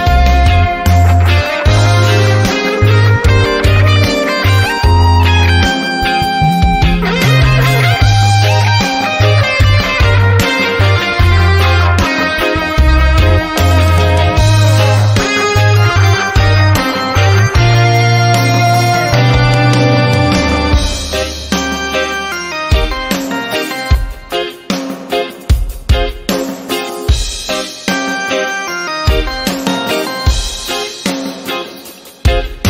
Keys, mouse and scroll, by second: 8.8 click, 11.5 click, 12.5 shift+click, 13.4 click, 14.3 shift+click, 15.1 click, 18.8 shift+click, 20.5 click, 24.4 click, 25.5-25.8 ctrl+scroll down 1, 26.6 click, 26.9 typing, 27.4 click, 29.4-31.3 typing, 31.8 click.